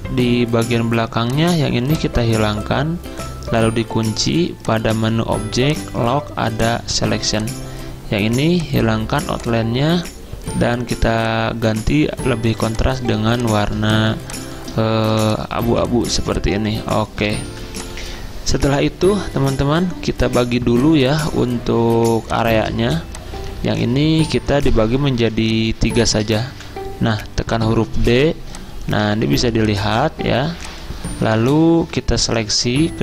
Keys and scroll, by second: 12.4 z, 15.1-15.7 typing, 22.4 typing, 25.2 z, 26.3-27.4 typing, 29.5 z.